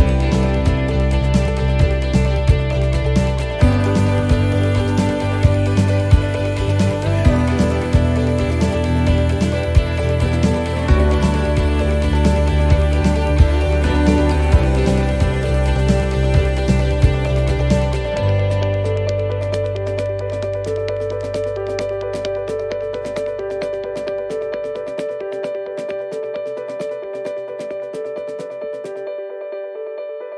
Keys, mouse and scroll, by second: 0.3 scroll up 1, 0.6-1.4 scroll down 6, 1.4 a, 2.3 s, 17.1 middle click, 18.4-18.8 scroll up 2, 18.8 middle click, 21.8 u, 23.6 middle click, 25.0 u.